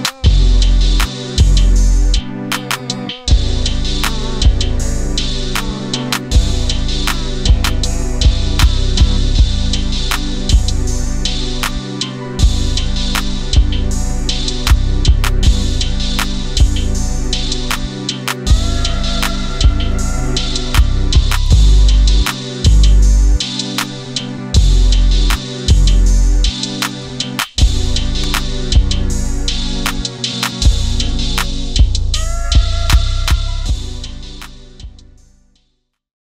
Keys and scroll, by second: 27.0 shift+space.